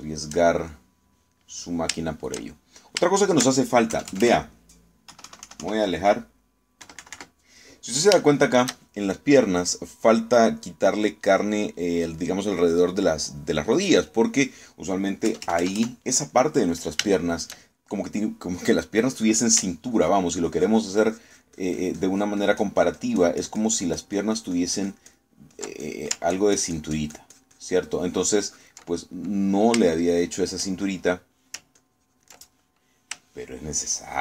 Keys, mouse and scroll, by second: 0.9 shift+middle click, 1.7-2.9 shift+middle drag, 3.1-4.7 shift+middle drag, 5.0 KP_Add, 5.5 middle click, 6.1 KP_1, 7.9 KP_Subtract, 9.3 shift+middle click, 15.1 middle click, 16.3 KP_Add, 17.4 middle click, 18.1 shift+middle click, 20.9-26.4 ctrl+drag, 26.5 ctrl+click, 27.9-29.9 ctrl+drag, 29.9 ctrl+middle click, 31.1 shift+middle click, 31.9 shift+middle click, 32.8 ctrl+click.